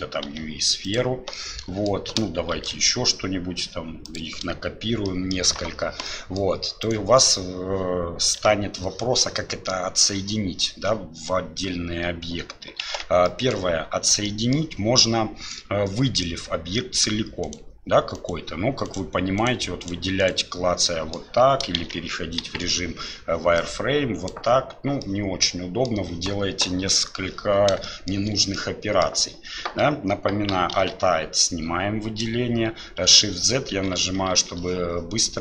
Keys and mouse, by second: 1.3 middle click, 2.5 shift+d, 5.1 click, 6.1 middle click, 13.3 Tab, 13.3 middle click, 14.3 middle click, 16.7 middle click, 18.9 right click, 19.4 right click, 19.8 right click, 20.2 right click, 20.9 middle click, 21.8 shift+z, 22.4 KP_1, 23.8 click, 25.0 middle click, 27.8 shift+click, 28.5 middle click, 30.8 alt+a, 33.1 shift+z, 33.7 shift+z, 34.4 shift+z.